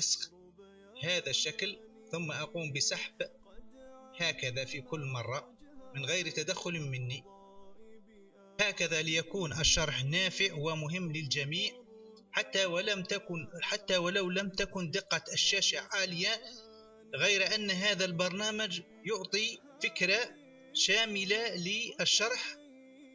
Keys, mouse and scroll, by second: 3.2-4.3 drag, 4.8-6.0 drag, 6.7-7.6 drag, 7.9-8.6 scroll.